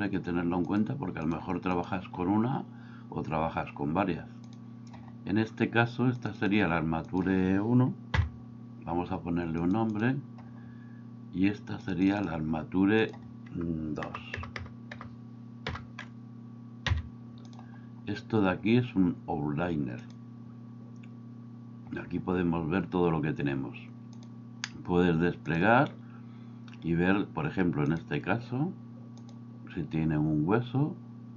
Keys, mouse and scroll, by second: 0.7 click, 1.3 click, 1.7 click, 4.4 click, 6.2-9.7 drag, 9.9-11.9 drag, 12.1-17.6 drag, 14.4 BackSpace, 20.0-22.0 drag, 24.2 click, 27.8 click, 29.2 click.